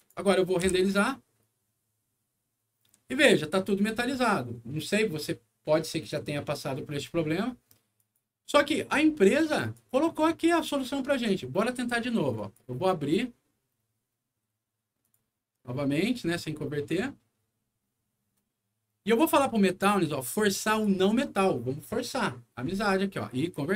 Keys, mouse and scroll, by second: 0.6 F9, 7.9 click, 9.6 click, 12.3 click, 15.0 click, 19.0 click, 20.5 click.